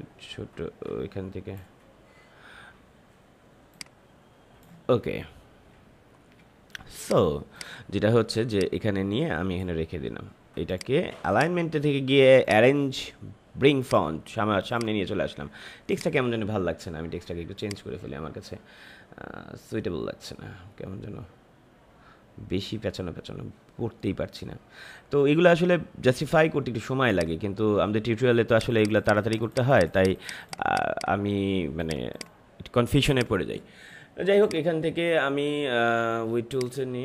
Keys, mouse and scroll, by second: 7.0-10.6 drag, 11.3 right click, 12.4 click, 22.7 scroll down 1, 27.0-37.0 drag.